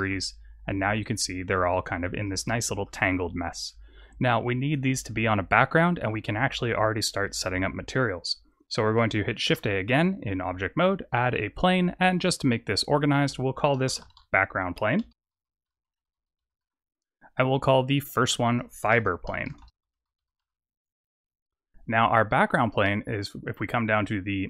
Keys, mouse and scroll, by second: 0.8 click, 1.2-2.3 scroll up 7, 2.3 shift+middle click, 3.3-4.0 scroll down 1, 4.0-4.5 scroll down 2, 9.3 shift+a, 12.8 click, 13.1 click, 17.3 click, 17.8 click, 18.0 click, 22.5 click.